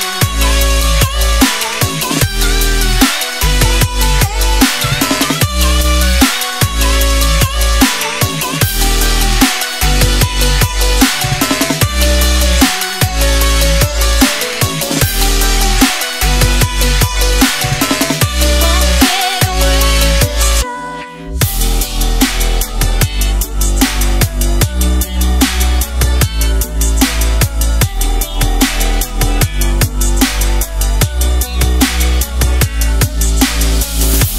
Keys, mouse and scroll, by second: 22.3 alt+scroll down 1, 23.6-25.3 scroll up 1, 25.3 click, 25.5 right click, 26.1 click, 31.3 click.